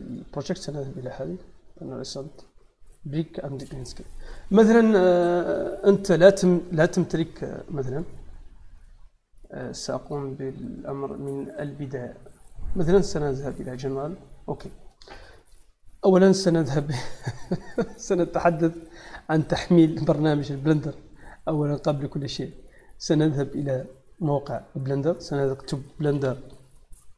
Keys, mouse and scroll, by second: 3.4 click, 7.8 click, 10.7 click, 11.5 click, 12.3 click, 13.4 click, 14.5-15.2 middle drag, 16.3 click, 17.8 click, 19.6 click, 21.8 click, 22.9 click, 24.1 click, 25.0 click, 25.8 b.